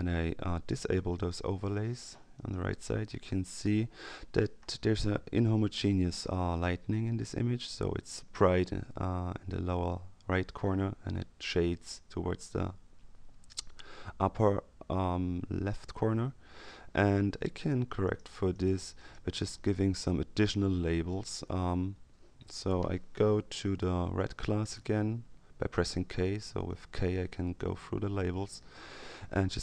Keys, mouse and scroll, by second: 0.7-1.7 drag, 17.5-19.6 drag, 24.0 k, 26.2 k.